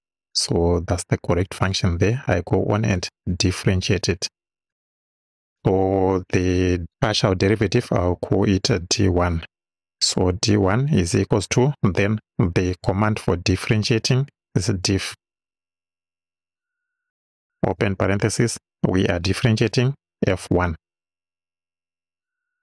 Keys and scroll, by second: 3.9 Return, 8.1 d, 9.1 1, 10.3 =, 14.7 d, 15.1 i, 16.6 f, 17.8 shift+f, 18.0 shift+9, 18.7 BackSpace, 20.4 f.